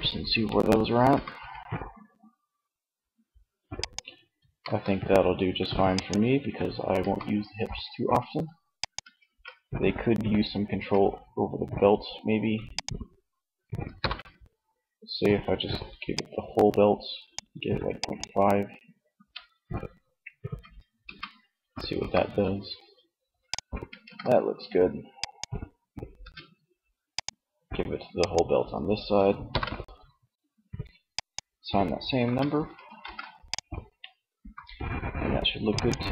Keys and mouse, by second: 0.5 r, 3.2-4.7 drag, 4.0 ctrl+z, 6.2 r, 8.2 click, 8.6 ctrl+z, 10.1 Tab, 13.4 ctrl+l, 18.4 Tab, 20.3 Tab, 21.4 r, 23.2 ctrl+z, 25.7 Tab, 28.8 ctrl+l, 31.5 Tab, 32.4 ctrl+s, 33.6 r, 35.5 ctrl+z.